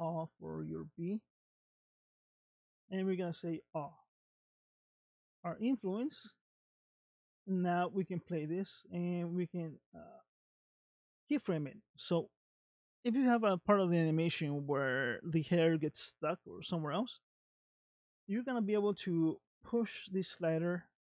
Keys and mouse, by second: 1.9-3.7 drag, 4.6 click, 6.0-9.0 drag, 12.5 middle click, 16.5 middle click, 18.5-21.1 drag.